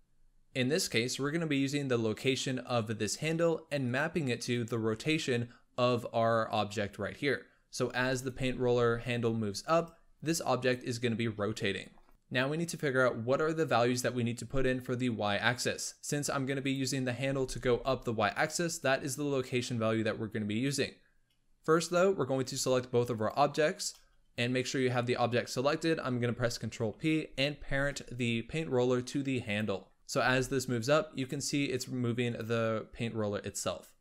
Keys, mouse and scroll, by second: 2.9-3.8 drag, 8.1 click, 8.5 g, 10.5 click, 12.1 scroll down 2, 16.6 click, 17.1 g, 18.6 click, 21.5 click, 23.1-26.1 shift+drag, 26.8 ctrl+p, 29.3 click, 30.1 g, 32.2-34.0 drag.